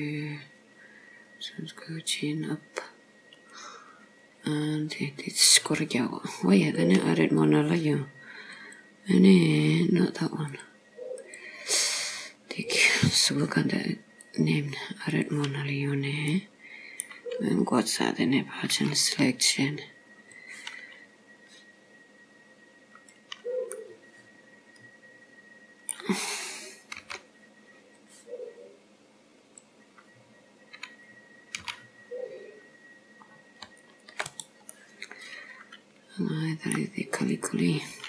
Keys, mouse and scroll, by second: 6.7 click, 8.7 click, 9.6 click, 10.6 click, 12.7 click, 14.3 click, 16.3 middle click, 18.7 b, 23.7 middle click, 27.1 b, 31.7 c, 34.8 middle click.